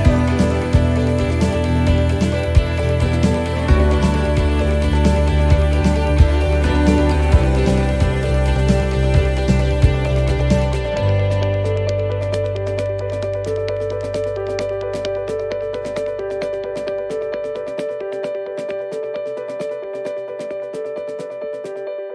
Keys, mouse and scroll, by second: 0.0-0.7 scroll down 3, 0.7 shift+middle click, 0.7-1.1 scroll down 2, 1.1-1.5 scroll up 3, 1.5 middle click, 2.1-2.4 scroll down 1, 2.5 middle click, 2.8 scroll up 1, 4.3 click, 4.8 scroll up 2, 5.5 shift+middle click, 5.9 scroll up 1, 6.3 middle click, 7.0 scroll up 1, 7.3 middle click, 7.8 scroll up 2, 8.1 middle click, 9.7 c, 10.8 right click, 11.1 c, 13.0 middle click, 13.3-13.6 scroll down 1, 13.6 shift+middle click, 15.2 c, 16.4 scroll down 2, 16.7 middle click, 18.8 shift+d, 20.0 middle click.